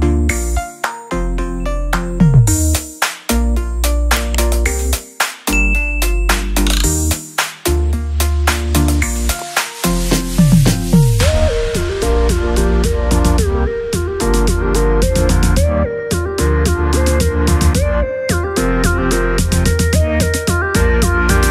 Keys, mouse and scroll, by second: 2.8-5.8 drag, 9.3 click, 11.0 0, 14.2 click, 16.4 typing.